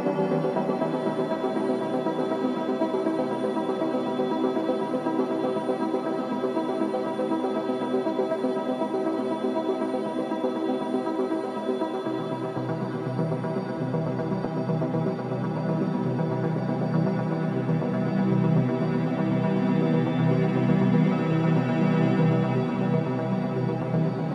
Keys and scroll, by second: 5.9 space, 18.9 space.